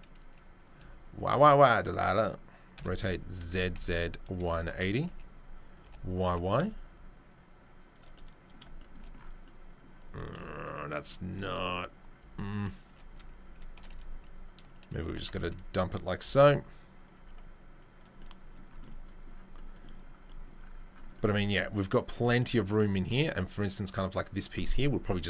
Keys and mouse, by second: 2.7 r, 5.1 g, 8.0-11.3 middle drag, 11.3-20.4 right drag, 12.2 s, 12.8 g, 15.0 g, 17.1 s, 20.4-22.1 drag, 22.1 shift+right drag, 23.0-24.0 drag, 23.0-24.0 right drag.